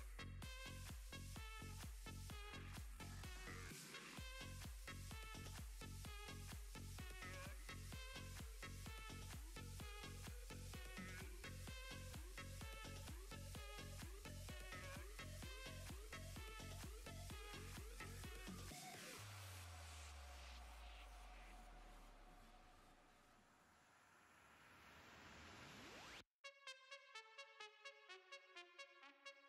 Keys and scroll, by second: 8.7 s.